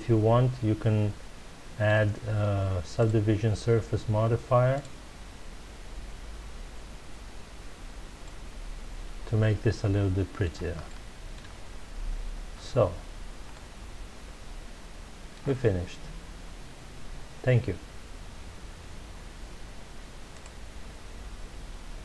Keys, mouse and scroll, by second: 2.9-6.0 drag, 8.2-11.5 middle drag, 11.5-12.7 scroll up 2, 12.7-13.5 scroll down 3, 13.5-16.5 middle drag.